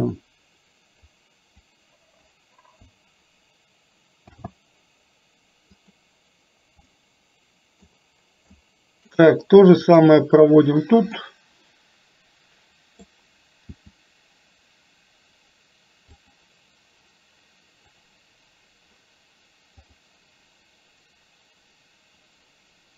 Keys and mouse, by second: 1.1 click, 4.3 shift+d, 6.9 middle click, 8.7 middle click, 11.2-13.2 middle drag, 13.7 r, 18.1 click.